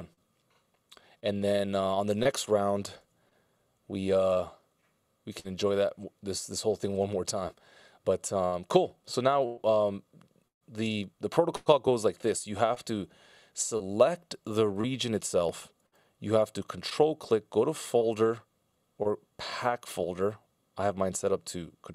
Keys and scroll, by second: 3.4 super+s, 13.8 super+z.